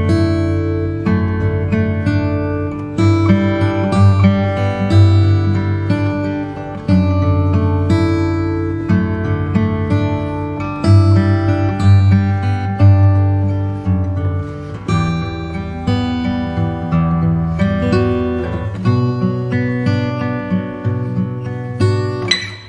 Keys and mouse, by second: 5.1 click, 6.7 click, 9.8 click, 11.9 click, 14.6-16.3 right drag, 16.9 click, 17.5-19.3 middle drag, 21.3-22.6 middle drag.